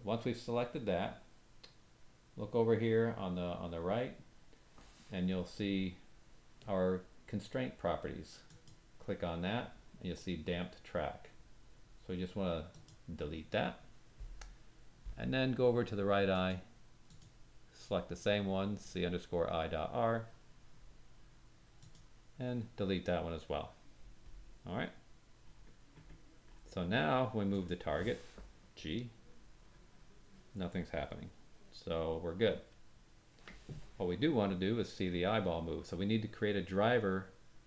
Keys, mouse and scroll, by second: 8.4 click, 12.7-16.5 drag, 17.0 click, 21.7 click, 24.8-26.5 scroll down 8, 25.5 click, 27.6 click, 28.8 g.